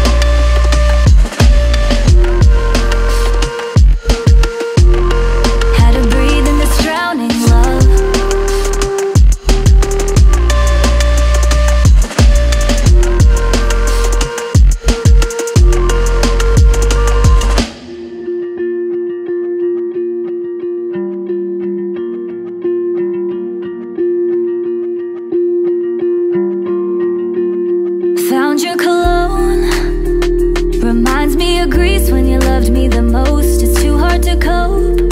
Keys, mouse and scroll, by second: 27.5 right click, 29.4 right click, 31.8 ctrl+v.